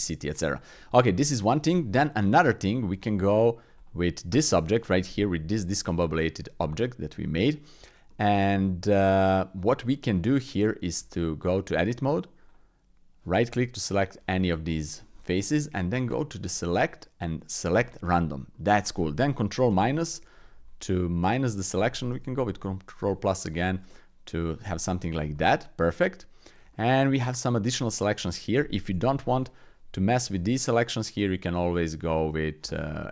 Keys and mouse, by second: 0.8 middle click, 1.5 Tab, 2.3 click, 2.9 Tab, 3.8-5.6 drag, 6.0 click, 6.7 shift+click, 7.2 click, 8.1 click, 9.9-10.5 drag, 11.0 Tab, 12.4-14.0 drag, 16.4-17.8 drag, 18.5 click, 19.7 ctrl+KP_Subtract, 20.8 click, 22.1 ctrl+KP_Add, 23.0 click, 23.9 click, 24.6 click, 25.3 click, 26.7 shift+click, 29.0 KP_1, 32.0 alt+z.